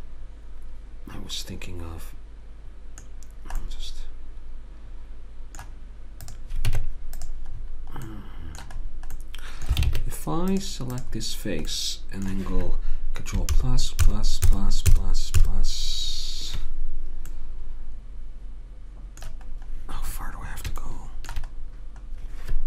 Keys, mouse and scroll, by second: 3.3-5.1 middle drag, 6.7 Tab, 9.9 ctrl+Tab, 10.9 click, 11.9-13.0 right drag, 13.1 middle click, 19.5-22.6 middle drag.